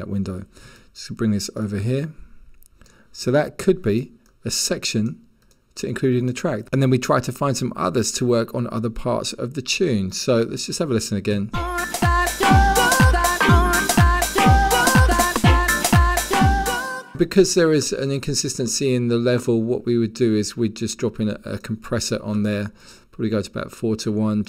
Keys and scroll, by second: 11.1 1, 12.8 1.